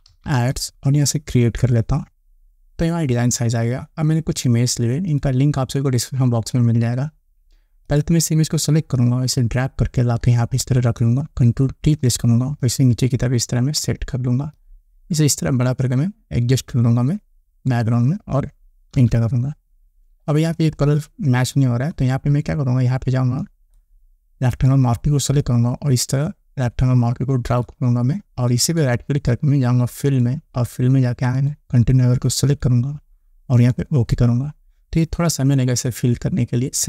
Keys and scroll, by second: 0.0-1.3 typing, 12.4 ctrl+t, 19.4 Return.